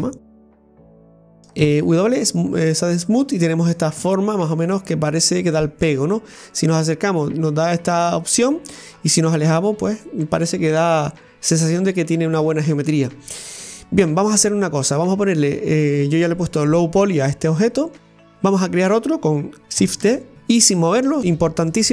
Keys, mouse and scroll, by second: 0.5-1.6 middle drag, 1.6 w, 2.4 scroll down 1, 2.7-6.2 middle drag, 6.2-6.8 scroll up 6, 6.8-8.5 middle drag, 8.5-9.4 scroll down 8, 9.4-12.6 middle drag, 20.0 shift+d.